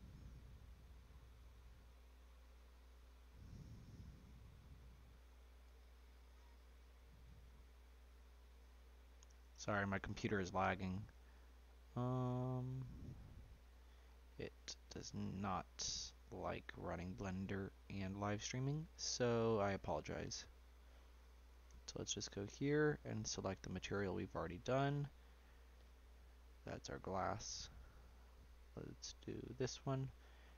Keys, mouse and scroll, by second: 0.1-1.2 shift+middle drag, 1.2 shift+click, 2.4 shift+click, 3.2-7.7 ctrl+drag, 7.7-8.4 scroll down 2, 8.4-9.1 scroll up 1, 9.1 shift+click, 10.1 shift+click, 11.3 click, 13.4 shift+click, 14.0 scroll up 4, 14.3-14.8 scroll down 1, 14.8-16.8 shift+middle drag, 16.8 shift+click, 17.4 shift+middle click, 18.3 shift+click, 18.7 middle click, 19.2-19.7 scroll down 1, 19.7-20.8 scroll down 3, 21.5 click, 22.4 click, 23.6 click, 24.3-26.9 scroll up 2, 26.9-27.4 scroll up 1, 27.8 click, 29.6-30.5 drag.